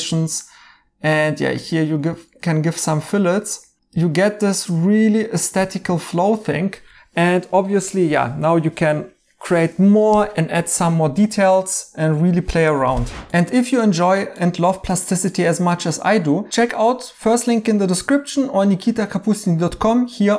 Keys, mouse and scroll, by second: 1.7 right click, 4.3 right click, 5.7 right click, 7.5 right click, 10.3 right click.